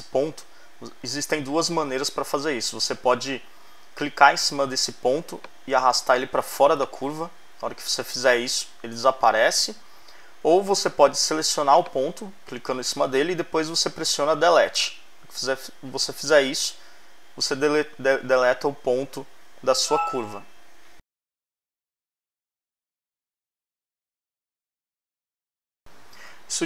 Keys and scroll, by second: 14.8 BackSpace.